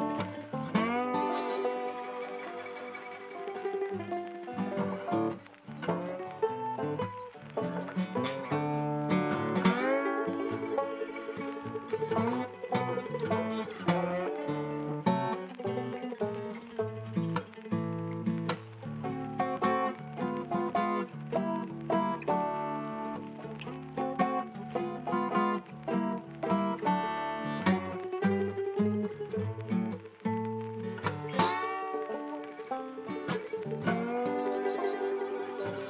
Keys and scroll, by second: 17.9 shift+d, 18.2 shift+f, 20.6 F3, 20.9 F4, 24.7 F10, 27.2-30.9 typing, 28.2 Return.